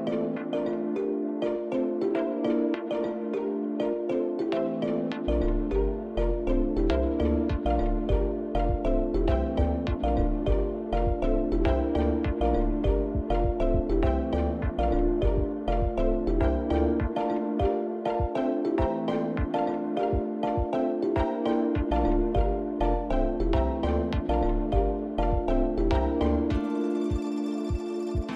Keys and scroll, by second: 5.0 7, 7.8 shift+z, 8.9 g, 10.5 shift+z, 25.1 shift+d, 25.7 y.